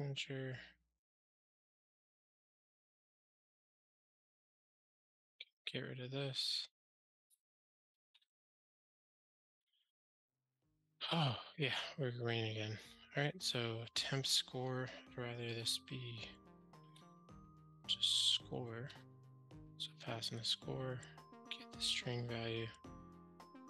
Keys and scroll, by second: 8.0 ctrl+alt+shift+r, 16.9 shift+F6.